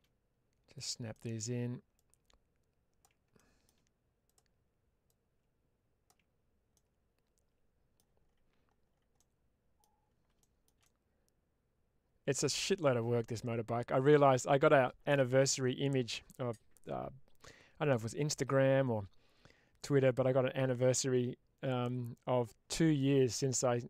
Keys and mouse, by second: 1.0 middle click, 1.9 ctrl+click, 5.0 ctrl+click, 6.6-7.8 middle drag, 9.0 middle click, 10.3 shift+middle click, 11.0-14.5 middle drag.